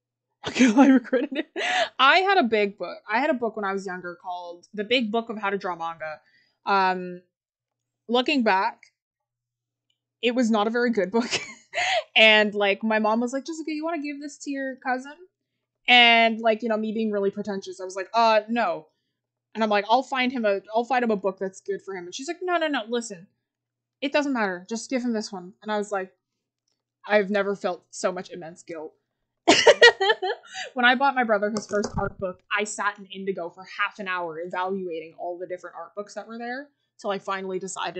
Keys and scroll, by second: 29.2 scroll up 1.